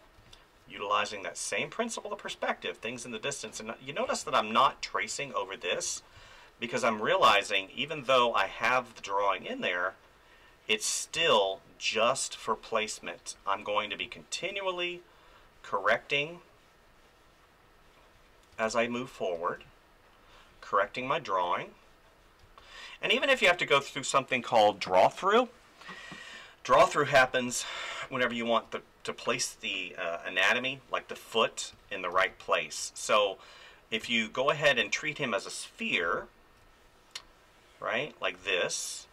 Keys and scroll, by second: 0.2 space, 4.0 space, 5.8 ctrl+z, 6.1 space, 11.1 space, 14.0 space, 18.5 space, 22.4 space, 27.2 space, 31.7 ctrl+z, 32.1 space, 34.0 space, 36.0 space, 38.4 space.